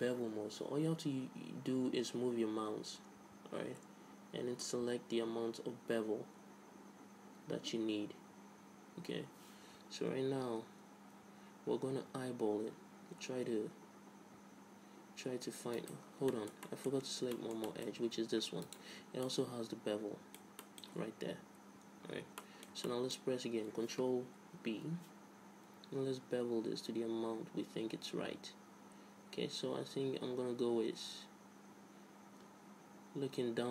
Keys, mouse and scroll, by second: 16.4-19.0 middle drag, 19.8-21.0 right drag, 21.0-25.2 middle drag, 25.0 ctrl+b.